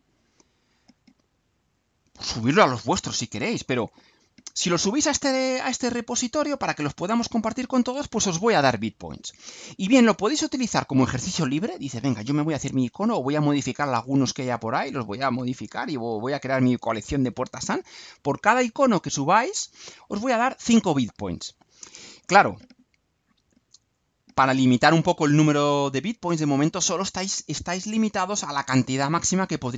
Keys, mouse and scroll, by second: 6.8 click, 24.0-24.8 scroll down 1, 25.4 scroll up 2, 26.4 scroll down 2.